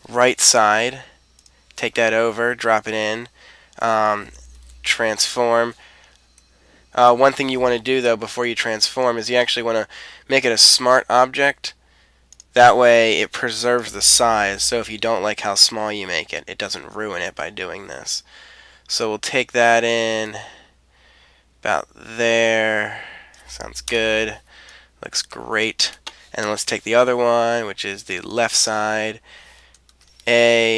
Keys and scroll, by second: 0.2 super+c, 2.1 super+v, 4.5 super+t, 7.9 Escape, 14.4 super+t, 23.9 Return, 29.9 super+a.